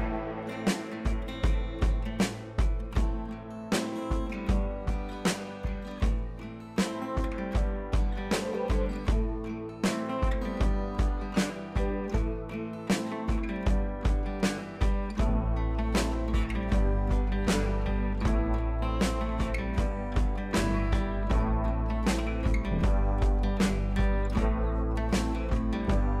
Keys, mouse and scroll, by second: 2.4 ctrl+t, 2.6-3.0 scroll down 1, 3.2-5.9 alt+drag, 8.1 ctrl+i, 8.7 g, 9.4-11.9 drag, 11.9 ctrl+z, 13.2 click, 13.7 b, 14.3 ], 14.4 ], 14.8 click, 19.3 click, 25.6 [, 25.8 [.